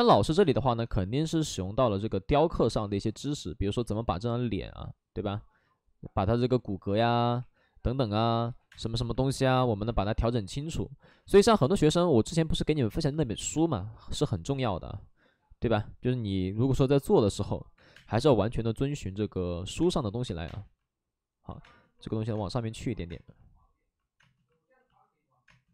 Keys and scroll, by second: 0.4 space, 2.6 3, 3.6 ctrl+z, 6.5 ctrl+z, 7.3 3, 8.5 2, 8.6 space, 10.0 space, 17.7 3, 17.9 space, 18.0 3, 19.8 space, 20.0 3, 20.4 space, 21.4 ctrl+z, 21.5 space.